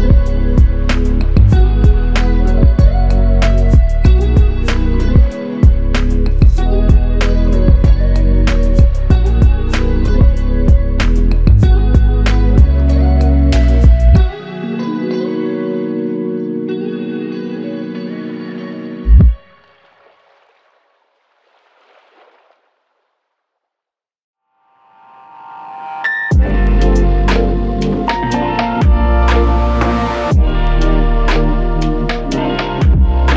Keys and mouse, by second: 1.0 shift+click, 4.2 shift+click, 7.9 ctrl+z, 10.2 alt+click, 13.5 double click, 20.5 shift+click, 23.8 alt+click, 29.1 shift+click.